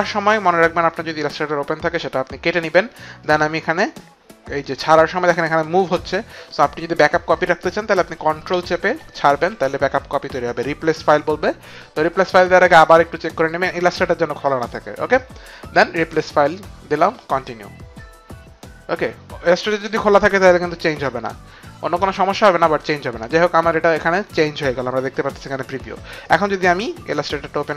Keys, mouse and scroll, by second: 3.2 click, 15.6 click, 17.2 click, 26.2 click.